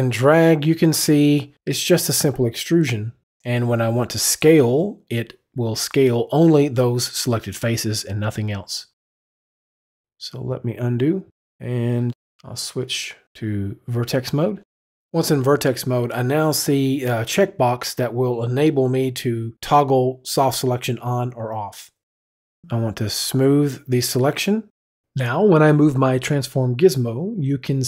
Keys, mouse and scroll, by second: 5.2 click, 10.7 ctrl+z, 11.6 ctrl+z, 15.4 click, 22.7 click, 26.6 click.